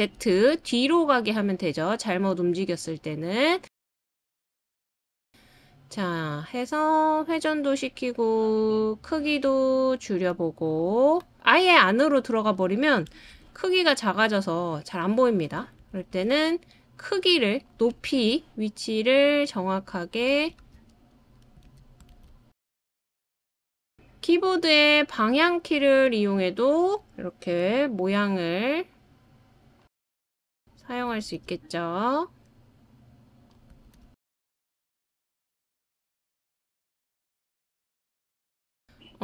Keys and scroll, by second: 1.8 super+z, 17.9 super+c, 18.1 super+v, 20.6 super+c, 20.9 super+v, 21.7 super+v, 24.5 shift+Down, 25.0 Down, 25.1 Down, 25.2 Down, 25.3 Down, 25.4-26.1 Down, 25.5 Down, 25.9 Down, 27.5 Down, 27.7-28.0 Down, 27.9 Down, 28.5 Down, 31.4 super+v, 34.6 super+v, 38.2 super+z.